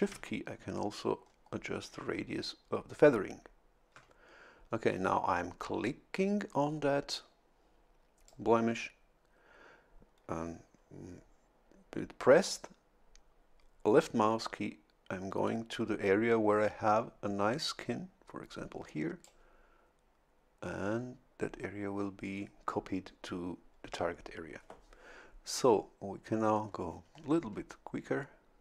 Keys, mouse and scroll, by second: 0.6-1.0 shift+scroll down 2, 1.2 shift+scroll down 2, 1.8 shift+scroll down 2, 2.4 shift+scroll down 2, 3.0 shift+scroll down 2, 8.3-19.5 drag, 26.6 scroll up 2.